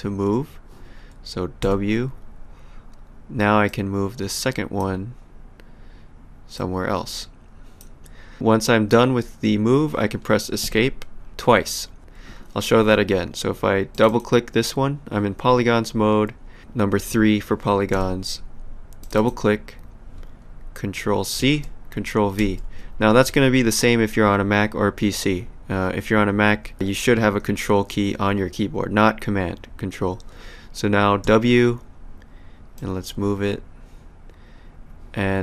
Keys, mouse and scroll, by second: 1.6 w, 3.7 click, 6.6 click, 10.6 Escape, 13.9 click, 17.9 3, 19.0 click, 21.4 ctrl+c, 22.4 ctrl+v, 31.2 w, 32.7 click.